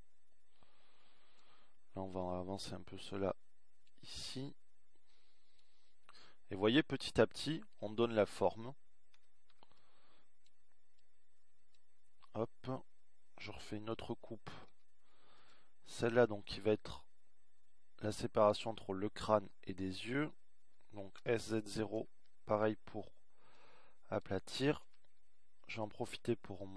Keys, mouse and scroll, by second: 1.5 a, 1.9 b, 5.7 a, 6.2 b, 12.8 a, 13.2 b, 18.4 ctrl+r, 25.0 s.